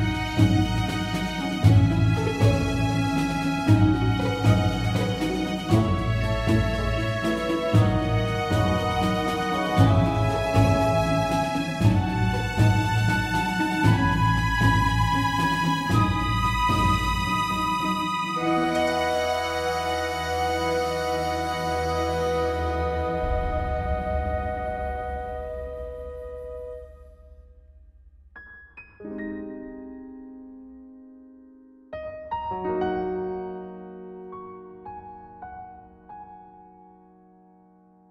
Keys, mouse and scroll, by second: 0.0-2.0 middle drag, 1.7 shift+f, 7.0 shift+z, 10.2-11.7 drag, 11.7 shift+z, 12.9 shift+z, 15.3 shift+z, 19.8 shift+z, 26.2 shift+z, 28.2 shift+z.